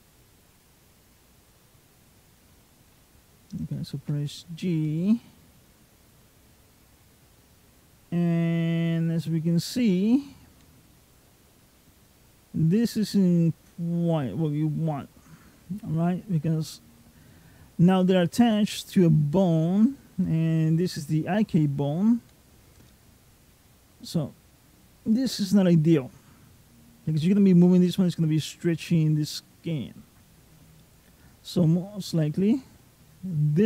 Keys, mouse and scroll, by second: 3.8 g, 30.6 middle click.